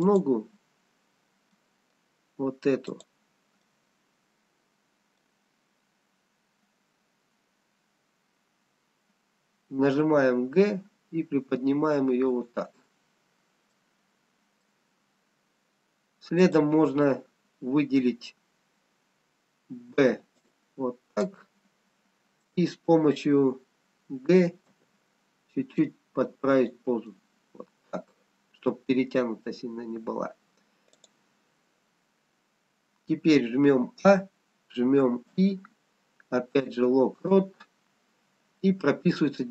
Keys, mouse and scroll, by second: 0.0 click, 1.5 middle click, 3.2 click, 3.9 middle click, 9.9 g, 13.7 middle click, 15.0-15.6 scroll down 1, 16.4 click, 19.9-20.8 scroll down 2, 19.9 b, 24.6 g, 27.1 middle click, 29.2 scroll up 2, 30.3-30.9 scroll down 1, 30.9 click, 34.1 a, 35.4 i.